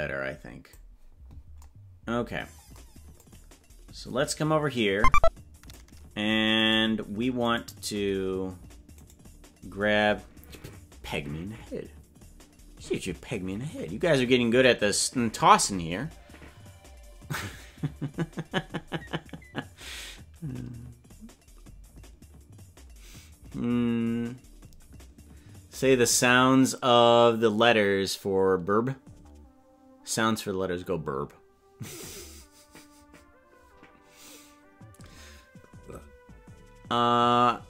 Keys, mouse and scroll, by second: 3.3-6.1 drag, 6.9 right click, 9.2 right click.